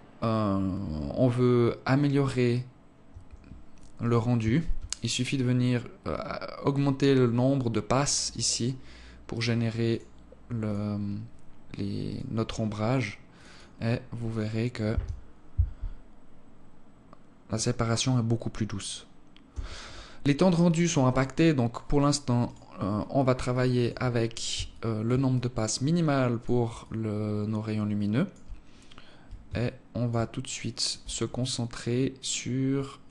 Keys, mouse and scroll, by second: 2.7 Escape, 3.5 right click, 4.9-5.5 scroll down 5, 6.3 click, 8.9 click, 11.7 right click, 12.9 click, 13.0 click, 19.1 Escape, 20.7 click, 22.0 right click, 23.1 click, 24.3 alt+shift+click, 24.9 alt+click, 29.1 alt+shift+click, 30.0 alt+click, 30.9 right click.